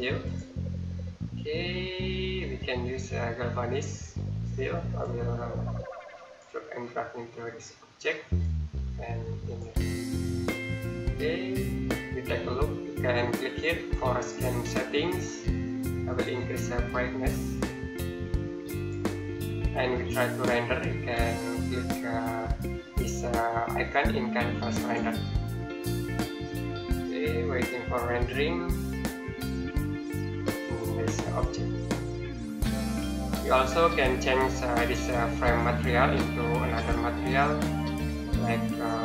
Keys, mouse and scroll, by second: 0.1 click, 1.1-2.3 scroll down 1, 4.8 click, 16.3 click, 24.6 click, 36.6-38.9 scroll down 1, 38.9-39.0 scroll up 1.